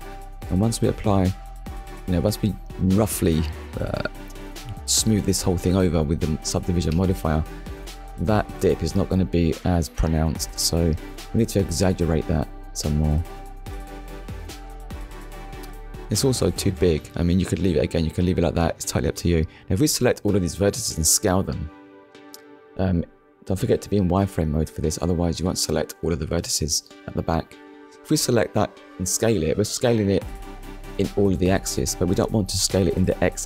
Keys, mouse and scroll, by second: 1.1 click, 3.0 shift+middle click, 4.3-4.7 scroll up 1, 7.7 click, 8.3 click, 10.1 click, 10.6 click, 12.5 click, 16.3 shift+middle click, 25.0 right click, 29.7 shift+x.